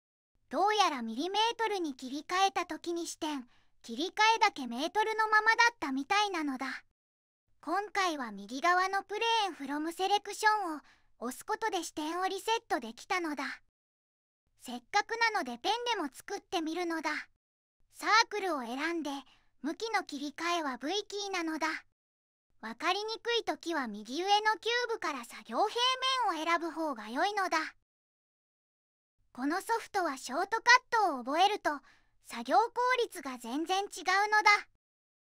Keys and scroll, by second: 20.1 v, 25.5 Tab, 26.4 1, 26.4 2, 26.9 Return, 27.4 Return, 29.3 e, 34.4 1.